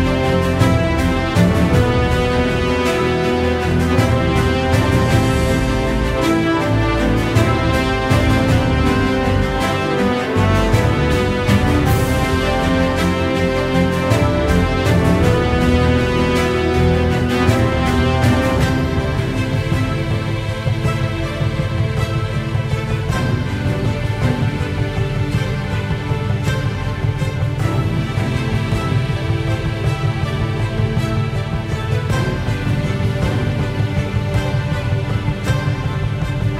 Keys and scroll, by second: 27.4 ctrl+z.